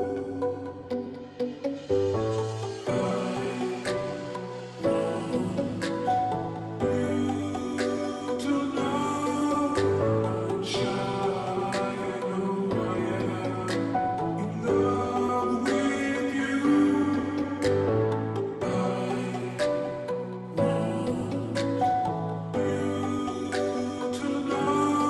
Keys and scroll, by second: 9.0-9.5 space, 10.3 space, 15.0 [, 15.2 [, 18.0 [.